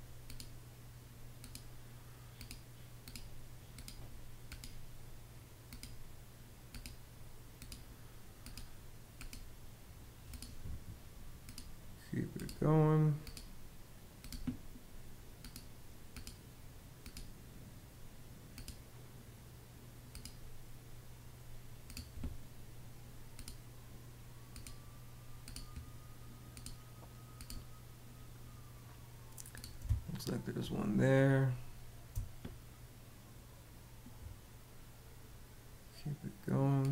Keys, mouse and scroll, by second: 29.5 space.